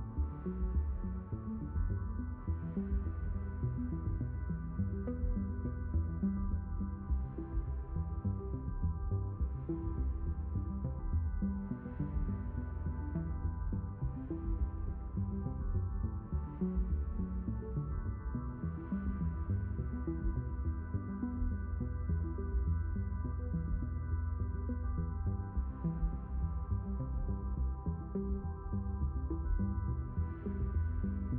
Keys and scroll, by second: 2.8 q.